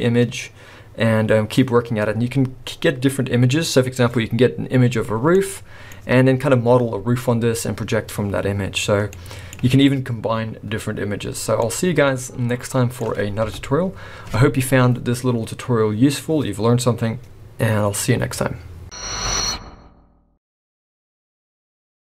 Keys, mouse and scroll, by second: 5.3 middle click, 5.9-7.9 scroll up 3, 9.1 middle click, 11.7 middle click, 13.4 KP_0.